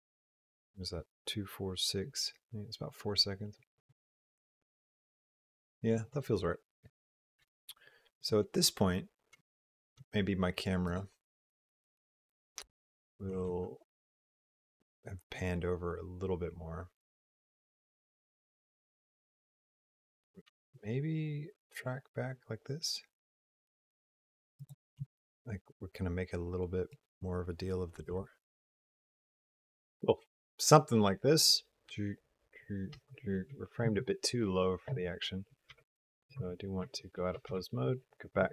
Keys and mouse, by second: 10.7 click, 13.2 r, 20.3 g, 24.8 r, 29.2 space, 32.8 space, 35.5 shift+b, 36.6 Tab, 37.4 shift+b.